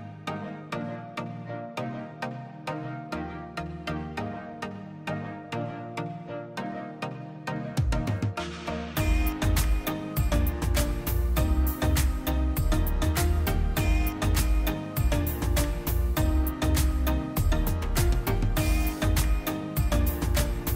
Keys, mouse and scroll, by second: 0.4 click, 3.3 click, 4.1 click, 4.9 click, 5.8 click, 6.9 click, 7.5 click, 8.6 click, 13.5 click, 14.2 click, 18.8 g, 19.5 x.